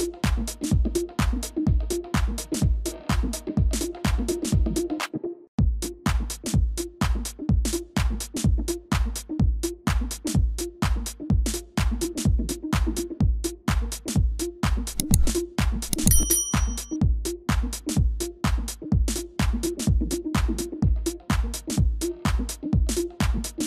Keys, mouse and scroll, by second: 1.9 space, 14.7 ctrl+[, 16.4 ctrl+], 18.0 ctrl+y, 20.9 ctrl+y, 22.5 ctrl+], 22.9 ctrl+].